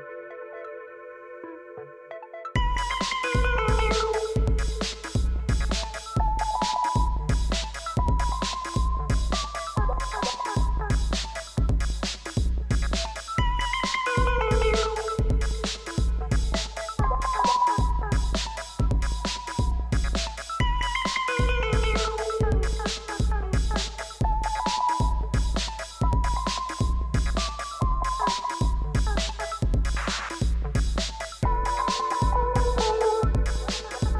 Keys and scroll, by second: 3.5 ., 4.1 3, 4.5 Return, 13.9 -, 14.2 9, 14.5 Return, 17.1 -, 17.3 5, 17.8 Return, 20.7 ., 21.4 9, 21.7 Return, 29.9 -, 31.9 ., 33.7 4.